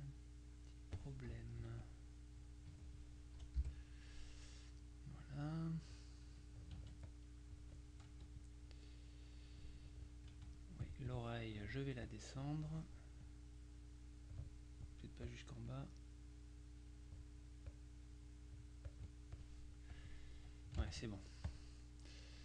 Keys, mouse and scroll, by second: 1.7 F2, 1.9 click, 2.8 F1, 3.7 Delete, 6.4 F2, 7.2 click, 8.2 F2, 8.5 click, 10.4 F1, 10.9 click, 12.2 click, 13.3 click, 15.4 click, 17.8 click, 19.0-20.0 drag, 20.8 ctrl+click, 20.9 ctrl+z, 21.5 click.